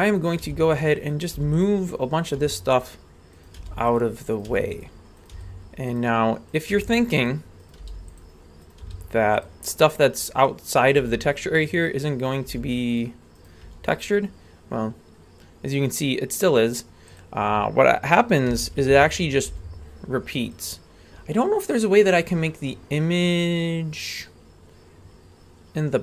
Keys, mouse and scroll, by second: 0.3 right click, 0.4 g, 1.1 right click, 1.3 g, 2.2 right click, 2.4 g, 3.4 right click, 3.6 g, 4.4 right click, 4.5 g, 5.2 right click, 5.3 g, 6.5 right click, 6.7 g, 7.6 right click, 7.8 g, 8.6 right click, 8.8 g, 10.7 right click, 11.0 g, 12.3 right click, 12.5 g, 13.4 right click, 13.6 g, 18.5 r, 19.5 g, 22.1-26.0 drag.